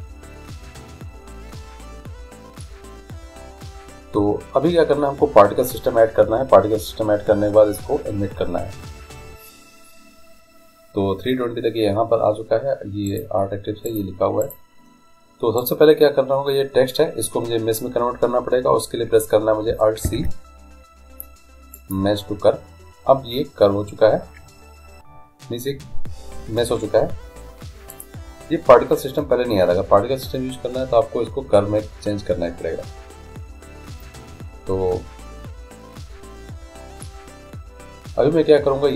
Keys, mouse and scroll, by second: 13.1-17.3 right drag, 20.1 alt+c, 27.9-29.8 drag.